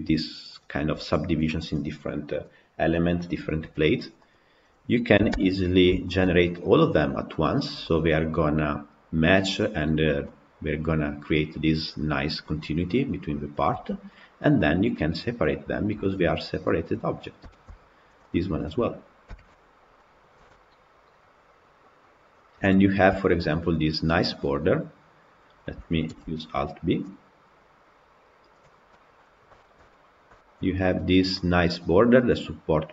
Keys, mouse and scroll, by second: 4.3 click, 5.3 ctrl+l, 6.0-13.7 shift+middle drag, 13.7 g, 16.5-18.3 middle drag, 18.3 click, 19.2 ctrl+l, 19.9 middle click, 20.4 g, 22.8-23.1 scroll up 3, 23.1 shift+middle click, 23.5-23.9 scroll up 1, 23.9-26.8 middle drag, 26.8 alt+b, 28.4 click, 28.8-29.8 middle drag, 29.8-30.2 scroll up 2, 30.2 shift+middle click, 30.5-30.9 scroll up 2, 30.9-32.9 middle drag.